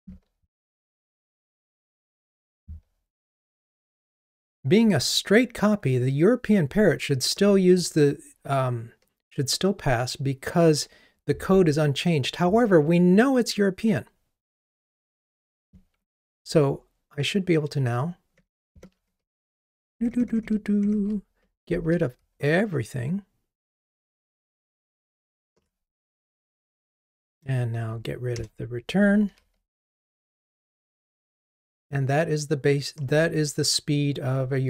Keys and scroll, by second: 4.2 ctrl+r, 18.4 super+BackSpace, 21.9 ctrl+r, 27.5 alt+Return, 29.3 ctrl+r.